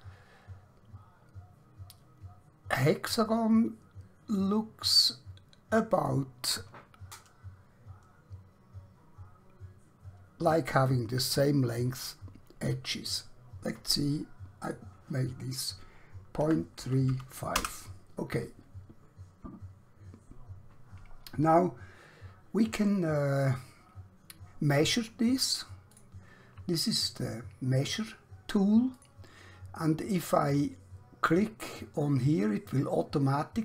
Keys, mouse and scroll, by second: 6.1 click, 14.6 click, 16.4-17.1 typing, 17.7 Return, 24.8 click, 28.9 click, 32.3 click.